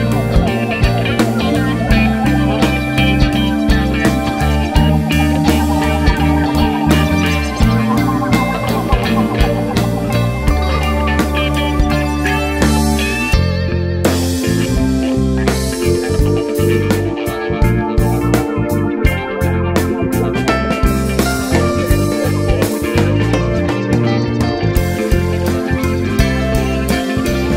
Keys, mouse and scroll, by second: 2.7 KP_7, 3.3 g, 4.7 click, 4.8 `, 5.4 scroll down 1, 5.7 `, 6.7 scroll up 1, 7.3 KP_4, 8.0 KP_7, 8.5 g, 10.3 r, 11.3 click, 12.2 Tab, 12.7 g, 13.8 click, 13.9-19.7 typing, 15.7 click, 17.3 Tab, 17.5-18.3 scroll down 4, 18.4 scroll up 2, 19.4 right click, 19.5 scroll up 1, 20.1 scroll down 1, 20.7 click, 21.0 KP_Decimal, 21.4 s, 23.3 click, 23.5 alt+a, 23.5 scroll down 1, 23.7 `, 24.1 scroll up 1, 24.6-25.3 scroll down 1, 26.7 scroll up 1, 27.4-27.5 drag.